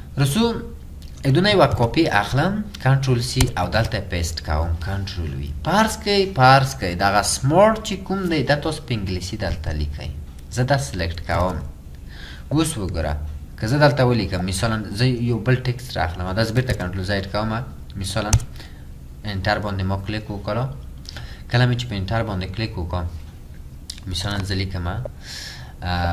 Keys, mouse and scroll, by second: 1.9-2.6 typing, 3.4 Return, 4.4 typing, 9.8 double click, 18.4 Return.